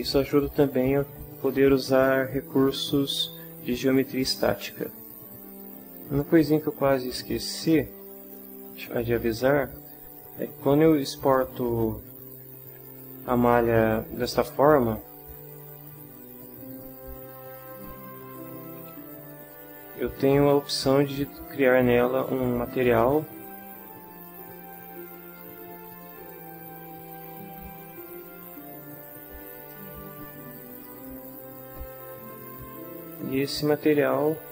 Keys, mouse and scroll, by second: 9.7 click, 16.7 click, 17.7 click, 25.9 click, 27.1 click, 28.0 click, 29.5 click, 30.7 click.